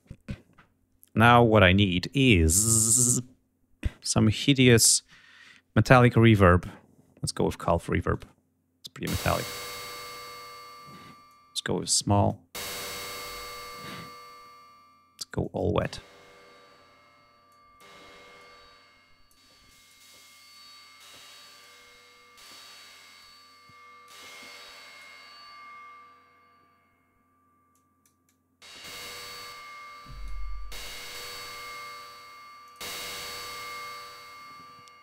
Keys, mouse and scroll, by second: 7.8 click, 10.9-12.1 drag, 12.6 click, 15.1 click, 17.2 click, 18.0 click, 19.3 click, 20.2 click, 21.3 click, 22.9 click, 24.4 click, 27.4-27.9 drag, 27.9-30.3 drag, 30.9 click, 31.4 click, 32.5 click, 33.4 right click.